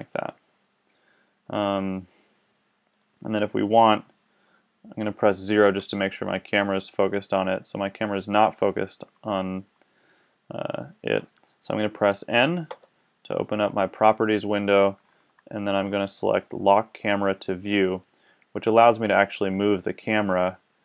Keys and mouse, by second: 2.9-4.7 drag, 5.6 KP_0, 12.6 n, 15.9-18.9 middle drag.